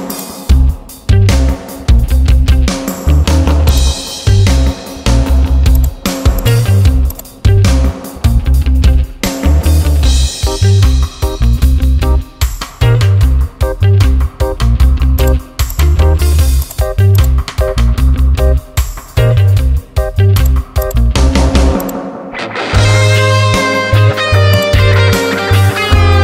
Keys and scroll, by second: 10.0 ctrl+j, 12.2 ctrl+e.